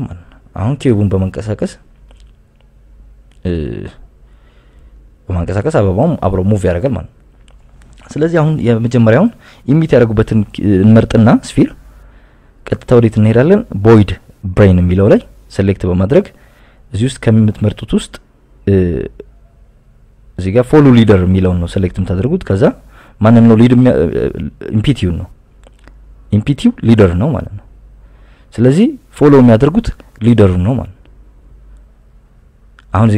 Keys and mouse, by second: 1.7 right click, 2.4 g, 2.7 x, 3.4 click, 4.2 KP_7, 4.8 KP_Subtract, 5.6 KP_Subtract, 6.0 click, 6.8 g, 8.6 KP_1, 9.6 right click, 10.5 click, 11.5-13.0 drag, 14.0 click, 15.7 click, 16.3 click, 17.4-22.8 drag, 24.4-27.5 drag, 31.4 click.